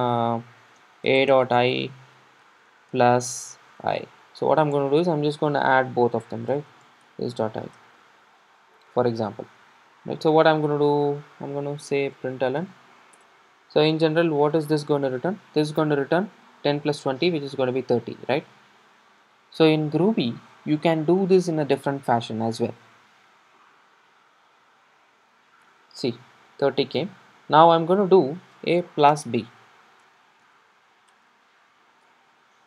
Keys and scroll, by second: 0.1 Return, 2.3 Escape, 4.8 Return, 7.8 Escape, 13.2 super+s, 13.2 Return, 17.9 super+r, 25.6 super+d.